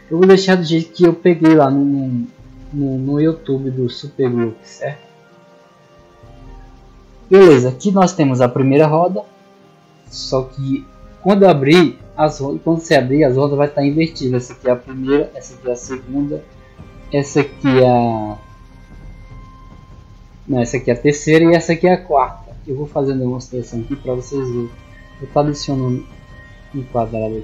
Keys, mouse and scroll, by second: 4.8-5.2 middle drag, 7.2 middle click, 8.3 right click, 9.1-9.5 middle drag, 14.1 right click, 15.6 right click, 16.6 right click, 20.2 right click, 21.3 right click, 22.6-22.9 middle drag, 23.3 click, 23.8 shift+s, 25.3 click, 25.8 shift+a.